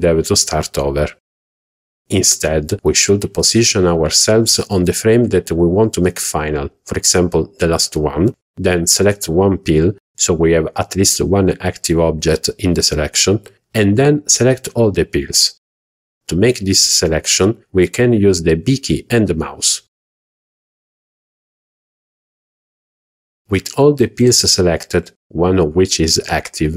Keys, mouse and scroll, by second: 2.0 click, 2.8 h, 3.2 click, 3.6 h, 4.4-5.7 drag, 6.3 z, 7.2-7.5 middle drag, 7.9 click, 9.4-10.4 middle drag, 10.6 middle click, 11.1 shift+middle drag, 11.4 middle drag, 11.9 scroll up 1, 12.8 click, 14.6 scroll down 1, 15.6 b, 17.2-19.2 middle drag, 19.6-20.9 middle drag, 21.0-21.4 middle drag, 23.0 middle click.